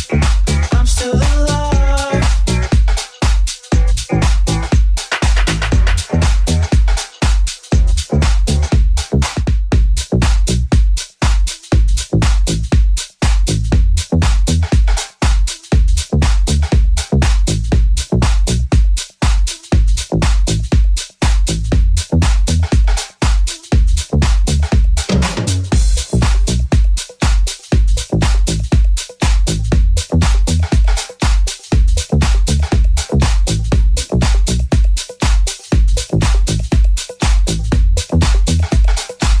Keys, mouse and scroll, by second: 0.6 s, 1.3 g, 15.1 ctrl+z, 16.1 right click, 16.2-19.5 alt+middle drag, 19.5 alt+right click, 19.5-25.5 alt+middle drag, 25.5 right click, 25.5-39.4 middle drag, 26.8 alt+z, 28.1 i, 30.5 ctrl+b, 34.2 ctrl+r.